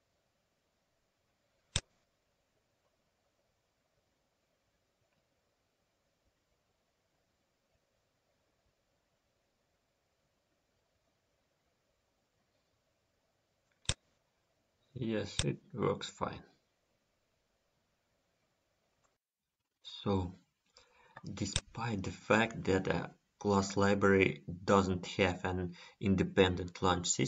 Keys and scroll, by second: 8.4 F10, 9.4 F10, 12.5 F10.